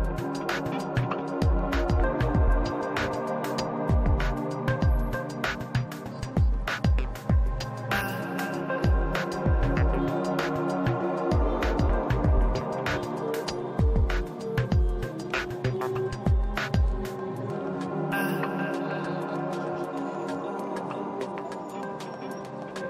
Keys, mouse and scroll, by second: 0.7-3.1 middle drag, 2.4-3.5 typing, 3.1 click, 4.1-7.0 drag, 5.0 middle click, 7.0-8.8 drag, 7.3 f, 8.2-10.1 middle drag, 9.4 f, 9.5-13.8 drag, 10.4-12.6 middle drag, 12.8-14.6 middle drag, 14.6 shift+c, 14.6 f, 14.7-18.8 drag, 15.0-16.6 middle drag, 16.6 i, 16.8 f, 18.8-22.8 middle drag, 21.7 shift+c, 21.8 f, 22.7 f.